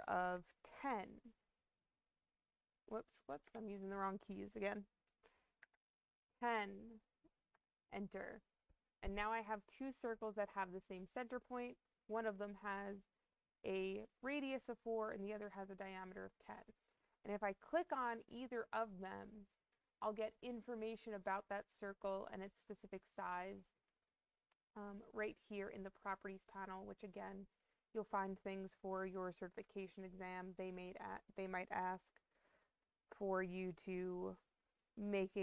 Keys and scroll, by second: 3.1 BackSpace, 3.3 BackSpace, 5.3-6.1 typing, 7.4 Return.